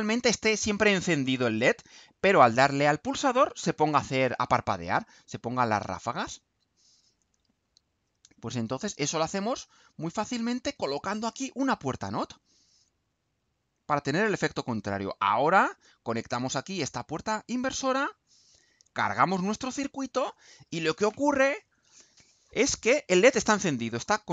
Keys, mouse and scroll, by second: 5.0 click, 6.0-7.4 drag, 10.2 click, 11.2 click, 12.2 click, 13.4-14.7 drag, 15.3 click, 16.6-17.4 drag, 17.6 click, 19.8 ctrl+u.